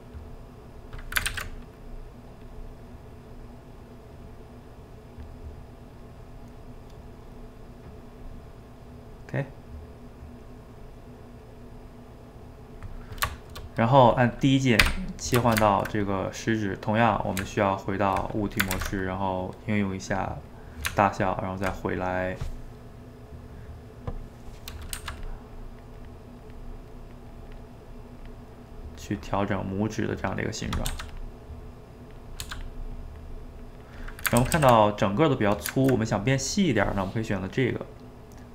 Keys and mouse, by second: 0.2-1.3 drag, 1.3 ctrl+z, 1.5 middle click, 1.8 click, 2.6-4.2 middle drag, 4.2-5.4 drag, 5.4 middle click, 6.0 click, 6.3-7.3 middle drag, 7.3 click, 8.3-10.1 middle drag, 10.1 click, 10.9 middle click, 11.4-12.9 drag, 12.9-14.9 middle drag, 14.9 d, 15.4-17.4 ctrl+shift+middle drag, 17.4 Tab, 18.7 ctrl+a, 20.6 middle click, 20.9 Tab, 22.2-25.0 middle drag, 25.0 f, 25.5-27.7 drag, 27.7 middle click, 28.2 click, 28.5 middle click, 28.7 click, 28.9 middle click, 29.5-30.9 drag, 30.9 f, 31.5 click, 32.4 f, 32.9-34.4 drag, 34.4 ctrl+z, 34.6 ctrl+z, 34.8-37.8 middle drag.